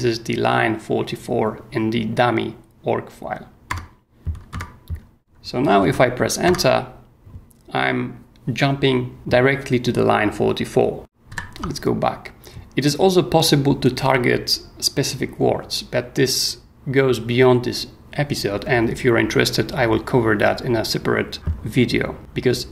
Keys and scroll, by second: 3.7 Return, 5.8 h, 6.4 Return, 11.3 ctrl+o.